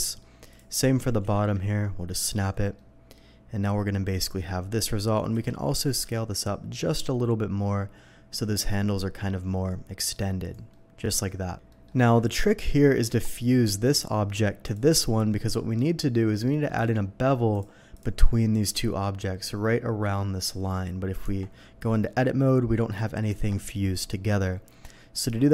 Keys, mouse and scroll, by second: 0.5 ctrl+click, 1.0 g, 1.2 z, 2.2 click, 2.8-4.4 middle drag, 4.9 ctrl+middle click, 5.3 a, 5.7 s, 6.0 x, 10.4 click, 10.7-11.2 middle drag, 11.7 middle click, 12.4 middle click, 13.1 Tab, 14.6 Tab, 14.6 click, 15.0-15.5 middle drag, 15.8 middle click, 17.5 click, 17.5 middle click, 17.9 click, 21.2 Tab, 21.9 middle click, 24.4 middle drag.